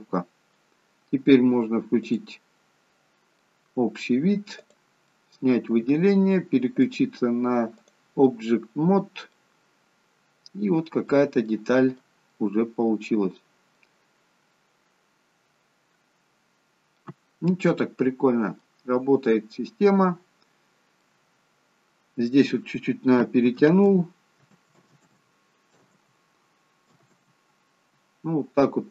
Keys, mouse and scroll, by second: 2.3 click, 3.1-4.8 scroll up 2, 3.6 middle click, 4.8 click, 5.3 middle click, 7.0 click, 9.0-9.7 scroll down 3, 9.5 middle click, 12.1 middle click, 16.1 middle click, 16.1-16.8 scroll up 2, 16.8 scroll down 1, 17.0 scroll down 1, 17.2 middle click, 18.9-19.3 scroll up 2, 19.3 middle click, 23.5 ctrl+z, 24.5 ctrl+z, 25.8 ctrl+z, 25.9 ctrl+z, 27.1 ctrl+z.